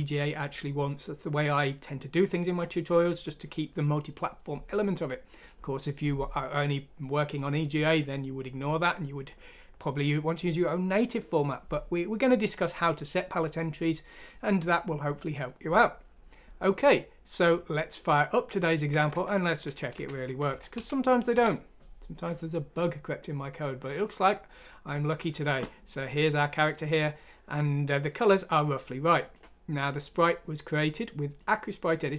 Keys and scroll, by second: 19.1 F6, 19.9 Down, 20.5 Down, 20.7 Up, 21.1 typing, 21.3 Return.